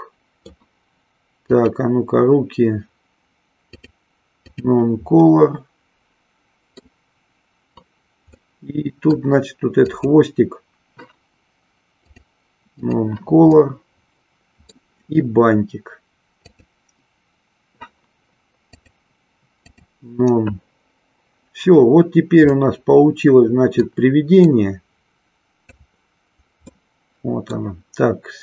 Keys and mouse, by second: 1.7 click, 3.7-4.7 drag, 5.4-7.0 middle drag, 8.4 middle click, 10.0 click, 12.0-13.0 drag, 13.7-14.9 middle drag, 16.7 click, 18.8-19.9 drag, 22.5-24.2 middle drag, 24.7-26.2 drag, 27.0 middle click.